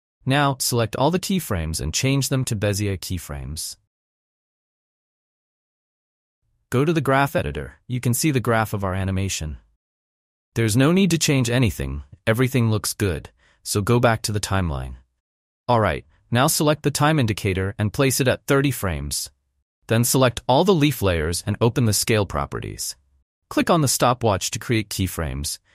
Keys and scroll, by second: 8.2 space, 21.6 s.